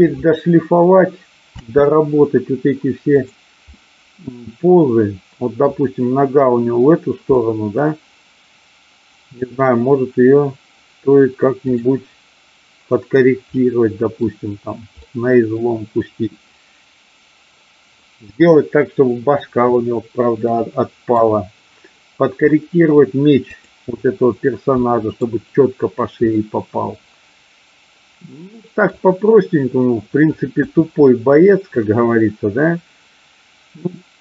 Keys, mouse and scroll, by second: 1.5 space, 3.2 click, 3.7-5.7 middle drag, 7.3-9.4 middle drag, 11.7 click, 13.4-14.2 middle drag, 15.1-18.5 middle drag, 20.5 middle click, 22.4-22.9 middle drag, 23.5-24.1 drag, 24.8-25.3 middle drag, 26.4-28.8 middle drag, 31.8-34.2 drag.